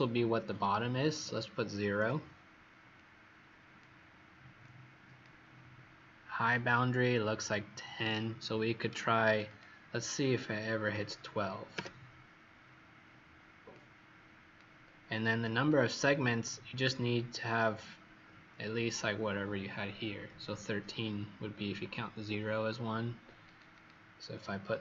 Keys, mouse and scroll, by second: 1.0 KP_0, 1.9 Return, 2.9 click, 9.4 click, 10.8 KP_1, 10.9 KP_2, 11.7 KP_Enter, 13.7 click, 23.7 click, 24.7 KP_1, 24.7 KP_3.